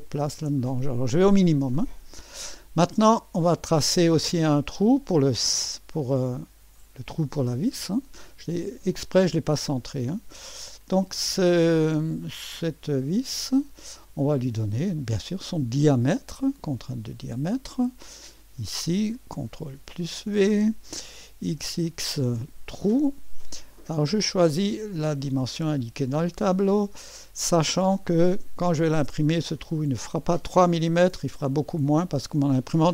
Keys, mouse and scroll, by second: 7.4-9.7 drag, 9.7-12.6 middle drag, 12.6-15.0 drag, 12.6 typing, 15.5-18.6 drag, 19.6 ctrl+v, 21.3-22.1 typing, 23.7-27.5 drag, 27.5-28.1 scroll up 1, 27.9 middle click, 29.3-31.7 drag.